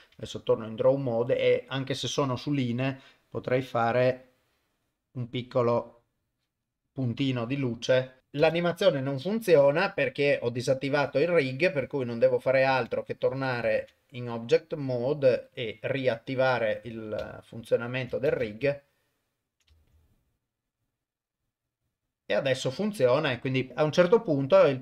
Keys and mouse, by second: 0.1 Tab, 4.1 click, 6.0 click, 8.2 shift+space, 8.4 shift+space, 9.4 shift+Left, 12.7 ctrl+Tab, 13.7 ctrl+Tab, 14.3 click, 15.5 click, 17.4 ctrl+middle click, 17.5 ctrl+click, 17.8 ctrl+middle click, 18.3 shift+space, 18.8 ctrl+middle click, 19.2 ctrl+click, 19.3 ctrl+middle click.